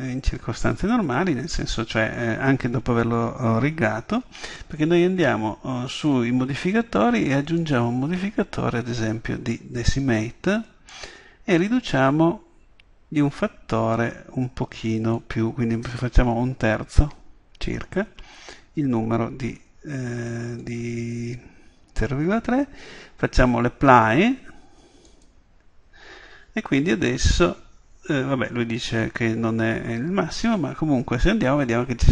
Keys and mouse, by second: 5.9-9.5 drag, 11.6-13.5 drag, 15.2-17.0 drag, 25.1-26.2 middle drag, 26.2-27.1 drag, 30.9 Tab.